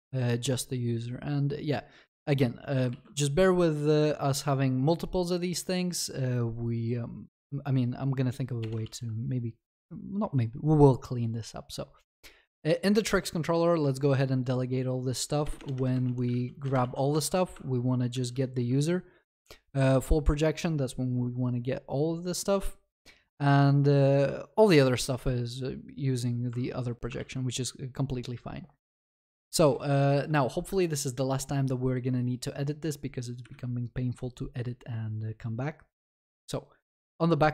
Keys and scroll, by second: 2.9 ctrl+c, 16.7 Return, 27.2 ctrl+s.